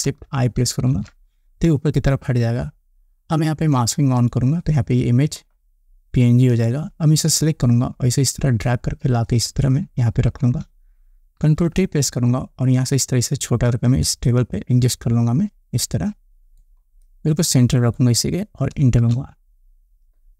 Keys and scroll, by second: 1.2 ctrl+shift+i, 11.9 ctrl+t, 19.4 Return.